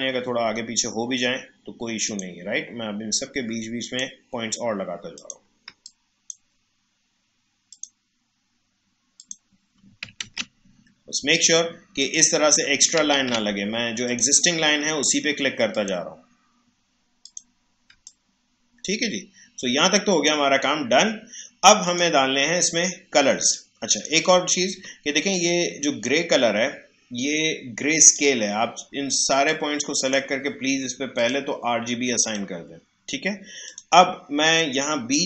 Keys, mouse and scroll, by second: 2.0 click, 5.6 space, 5.8 click, 5.8 click, 6.1 space, 7.7 click, 10.2 ctrl+z, 12.0 click, 13.1 ctrl+z, 14.1 click, 17.9 space, 18.0 click, 18.4 space, 21.8 click, 23.3 space, 23.5 click, 23.9 space, 24.4 alt+scroll down 1, 25.3-35.2 drag.